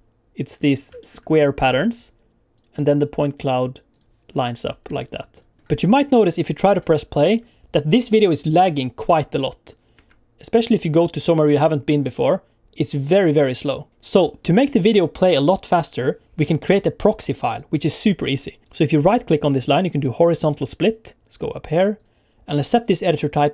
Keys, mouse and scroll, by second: 0.7 scroll up 2, 1.0 shift+middle click, 2.5 click, 3.9 click, 5.0-5.5 alt+scroll down 6, 5.5 alt+scroll up 1, 6.4 click, 7.3 space, 9.9 space, 10.5 click, 11.0 space, 18.6 Escape, 18.6 right click, 19.5 right click.